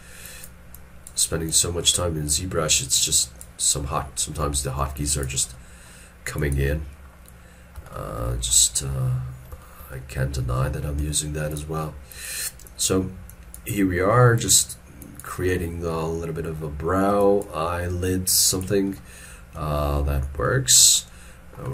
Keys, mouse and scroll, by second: 0.3 double click, 8.0 shift+middle click, 8.3 shift+middle click, 8.8-9.2 scroll up 1, 9.7 shift+middle click, 10.0 shift+middle click, 11.0 f, 12.7 double click, 15.6 middle click, 20.0 scroll down 1, 20.5 shift+middle click, 21.0 middle click.